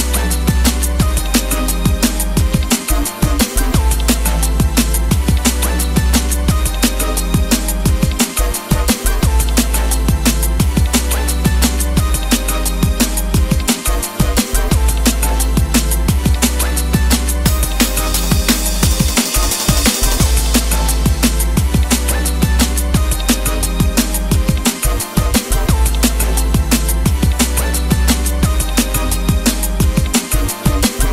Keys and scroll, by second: 9.8 Escape, 17.5 Escape, 20.5 Escape.